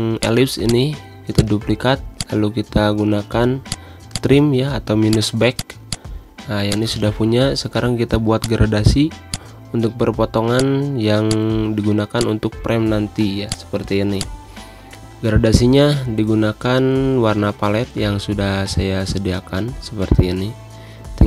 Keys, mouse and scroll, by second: 2.1 shift+click, 3.7 click, 5.8 space, 5.9 click, 6.2 space, 6.7-16.5 drag, 16.6-21.2 drag.